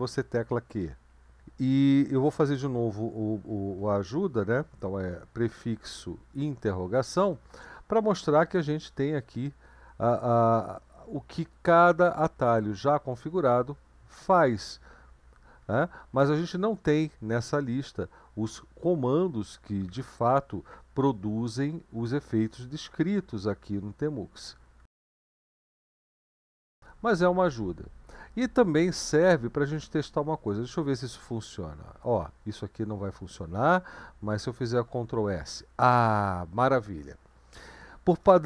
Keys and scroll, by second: 0.5 q, 3.8 ctrl+b, 5.8 Down, 12.4 Up, 12.6-14.0 Down, 14.3 Down, 14.7 Down, 14.9 Down, 15.3 Down, 15.4 Down, 15.8 Down, 16.1 Up, 16.4 Up, 16.9 Right, 17.6-18.5 Right, 18.7 Down, 18.9 Down, 19.3 Down, 19.5 Down, 19.9 Down, 20.1 Down, 21.0 Left, 21.7 Left, 22.3 Down, 22.5 Down, 23.2 Down, 23.4 Down, 24.5-25.8 typing, 26.5-28.1 Up, 28.3 Down, 28.5 Down, 28.7 Down, 28.9 Down, 31.2 /, 34.9 ctrl+s.